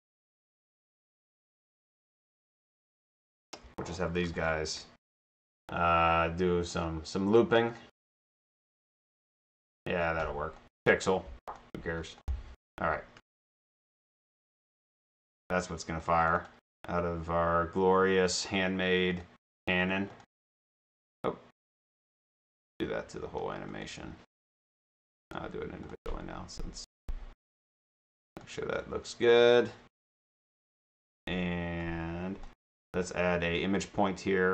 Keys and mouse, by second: 1.8 click, 2.3 shift+click, 2.8 click, 4.4 click, 7.8 click, 10.6 click, 12.3 click, 13.7 shift+click, 14.8-16.1 drag, 16.3 click, 19.2 click, 21.6 click, 21.8 click, 23.7 click, 25.3 click, 25.8 click, 27.0 click, 29.6 click, 31.8 click, 32.8 click.